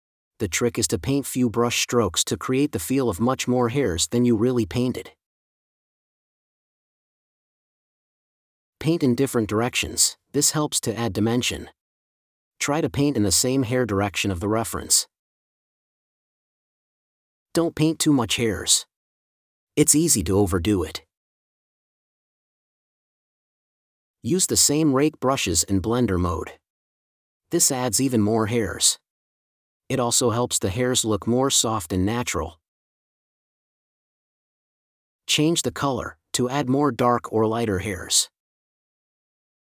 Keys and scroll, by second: 3.8 space, 4.3 super+space, 6.2 super+space, 7.8 space, 10.0 super+s, 15.1 super+z, 15.6 super+z, 17.4 space, 20.0 super+z, 22.4 super+z, 22.5 super+z, 28.3 space, 28.9 space, 31.4 space, 32.5 4, 35.7 space.